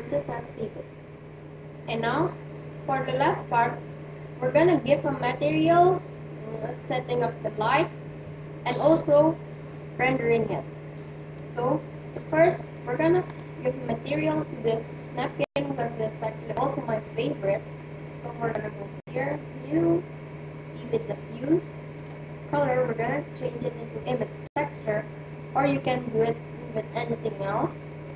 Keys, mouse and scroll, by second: 11.4-13.0 middle drag, 13.8-15.2 right drag, 18.4-21.0 drag, 21.9-23.9 drag, 27.9 click.